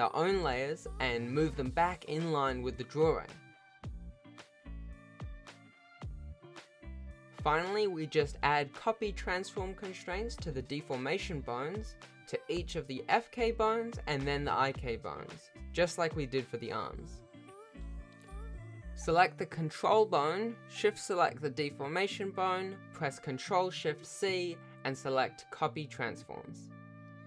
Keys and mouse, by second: 1.5 alt+a, 1.6 c, 2.0 g, 2.9 alt+a, 3.1 c, 3.7 m, 4.2 click, 4.6 g, 5.7 ctrl+s, 6.0 ctrl+s, 6.3 shift+middle click, 6.7 ctrl+Tab, 7.3 click, 7.8 g, 9.7-10.1 ctrl+shift+middle drag, 10.1 ctrl+alt+shift+a, 10.5 ctrl+shift+middle drag, 11.0 ctrl+s, 11.6 ctrl+shift+click, 13.1 ctrl+shift+middle drag, 13.5 alt+a, 14.1 click, 16.4 shift+middle drag, 16.8 ctrl+shift+s, 17.3 shift+middle click, 17.6-18.0 drag, 18.0 r, 18.4 r, 18.8 shift+middle drag, 19.5 r, 19.9 r, 21.6-22.0 ctrl+shift+middle drag, 22.1 ctrl+alt+shift+a, 22.5 shift+middle drag, 22.9 ctrl+s, 23.5 click, 25.0 ctrl+shift+middle drag, 25.5 alt+a, 26.0 click.